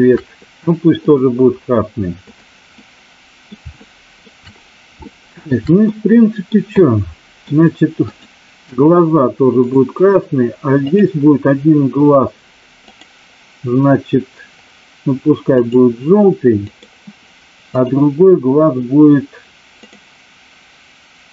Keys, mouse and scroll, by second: 1.0 click, 2.3 click, 2.7-3.5 middle drag, 3.7-4.1 shift+middle drag, 5.0 shift+middle click, 5.9 middle click, 6.6-7.5 middle drag, 8.1 click, 13.0-15.7 drag, 16.6 click, 17.7 click, 20.0-21.3 drag.